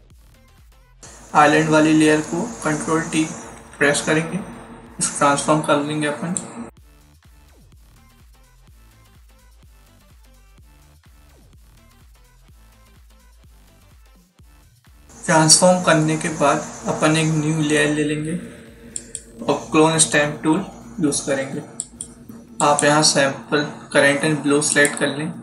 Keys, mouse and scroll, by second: 0.0-0.1 typing, 3.4 t, 6.3 click, 10.1 click, 10.3 click, 12.0 click, 12.5 click, 18.8 click, 21.7 click, 22.5 click.